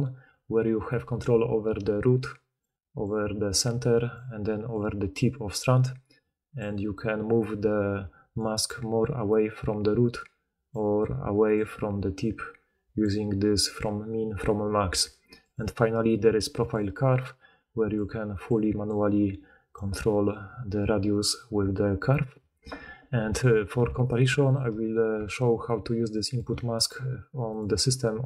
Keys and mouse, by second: 24.7-28.2 drag, 24.7-28.2 middle drag, 24.7-27.6 right drag.